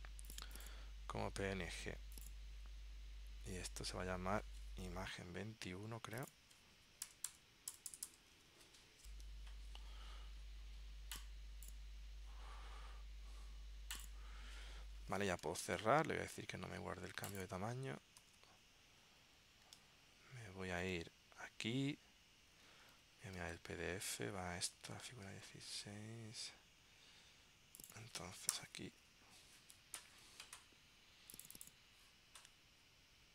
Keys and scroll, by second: 15.5 super+w, 18.3 super+q, 19.9 super+Tab, 23.0 super+Tab, 25.4 super+Tab.